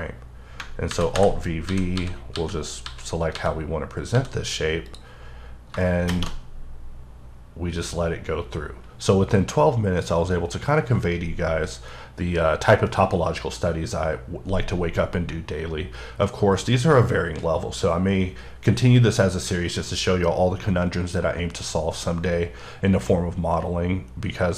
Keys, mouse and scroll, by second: 0.9 alt+v, 1.7-4.2 typing, 4.9 click.